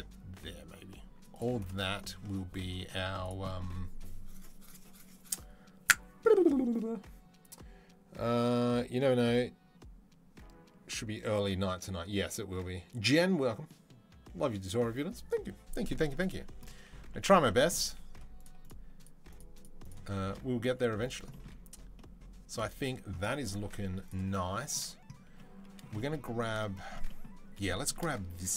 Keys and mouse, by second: 2.3-5.9 drag, 2.7 z, 18.5 shift+middle click, 18.8 shift+middle click, 19.1 shift+middle click, 19.7 shift+middle click, 20.6 z.